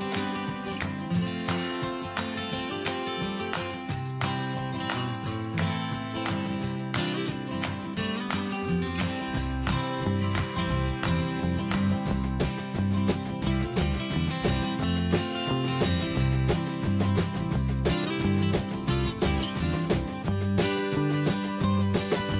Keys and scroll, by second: 10.0 ctrl+v.